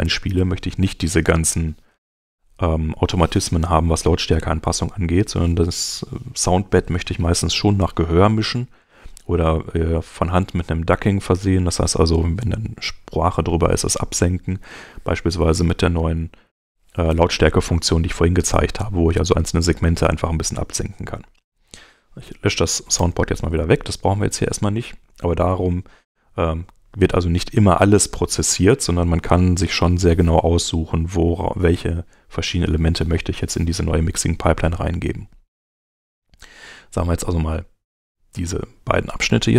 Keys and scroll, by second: 22.2 BackSpace, 23.0 Return.